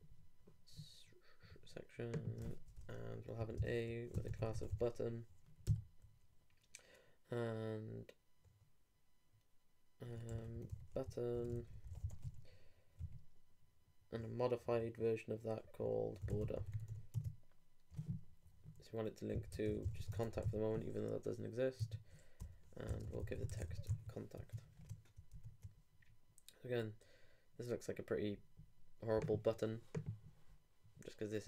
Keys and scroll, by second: 22.9 shift+Return, 23.0 shift+o, 23.9 super+t, 24.4 super+Tab, 25.3 super+r.